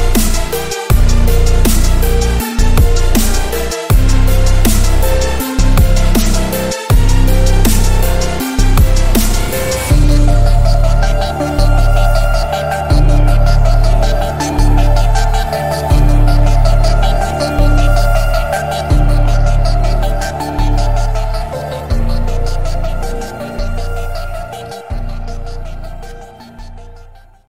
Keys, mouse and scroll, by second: 1.8 click, 3.0 click, 3.8-4.7 click, 6.4-7.1 alt+scroll down 2.